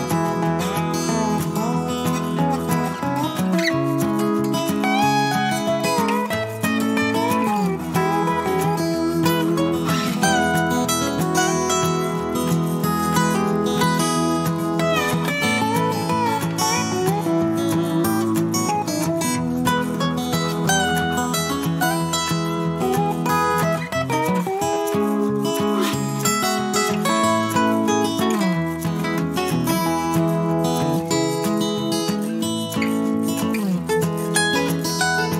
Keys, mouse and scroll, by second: 1.9 click, 5.2 click, 6.6 click, 8.9 click, 9.5 click, 10.4 click, 11.3 click, 11.6 click, 12.1 click, 14.7 click, 16.2 click, 18.5 click, 19.9-25.4 drag, 26.0-27.0 ctrl+drag, 27.3-30.2 ctrl+drag, 31.4 click, 32.8 -, 33.3 middle click.